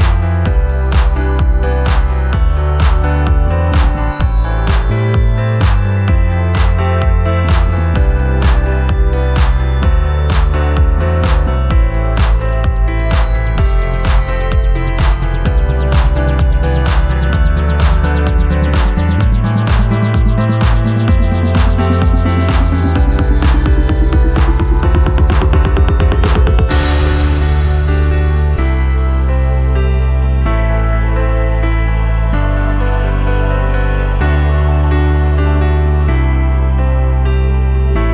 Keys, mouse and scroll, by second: 0.4-1.1 drag, 2.1 click, 4.3-8.3 drag, 8.9 click, 9.2 right click, 10.2 click, 11.4 right click, 12.7 click, 13.9 click, 15.2 click, 17.5-17.9 scroll down 3, 18.0 alt+click, 18.3 alt+middle click, 18.6 scroll down 1, 18.9 alt+middle click, 19.3 scroll up 2, 19.7 alt+middle click, 21.5 click, 22.2-22.6 scroll down 3, 24.2 click, 24.5 click, 26.5-28.6 drag, 29.3 click, 29.9 click, 30.5 scroll up 1, 31.1 scroll down 2, 31.4 scroll up 2, 32.9-35.1 drag, 35.5 scroll down 2, 35.8 alt+click.